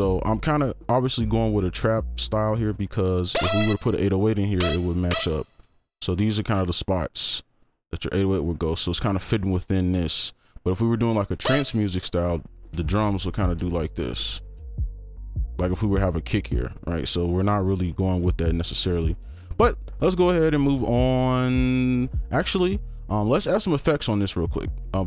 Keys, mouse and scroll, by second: 1.4 double click, 2.6 right click, 2.8-4.5 scroll up 1, 4.5 double click, 5.3 ctrl+click, 5.7 shift+click, 6.6 shift+right click, 6.6 click, 7.5 ctrl+click, 7.8 right click, 10.3 right click, 12.1 alt+click, 12.7 ctrl+alt+click, 12.9 ctrl+shift+click, 13.3 ctrl+click, 13.6 shift+click, 14.6 shift+click, 15.2 shift+click, 15.7 shift+right click, 16.1 ctrl+click, 16.7 right click, 17.7 scroll down 1, 17.9-18.3 scroll up 1, 18.3 ctrl+click, 18.8 Delete, 19.0 right click, 19.9 double click, 22.7 right click, 23.3-23.8 scroll down 1, 23.8-24.3 scroll up 1, 24.3-24.9 scroll down 1, 24.9-25.0 scroll up 1.